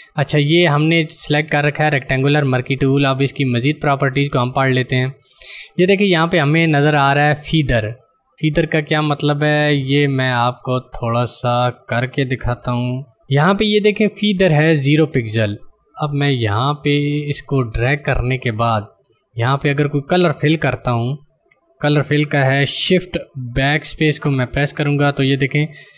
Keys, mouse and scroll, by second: 4.7 click, 12.8 click, 16.4 click, 24.0 shift+Num_Lock, 24.1 shift+BackSpace.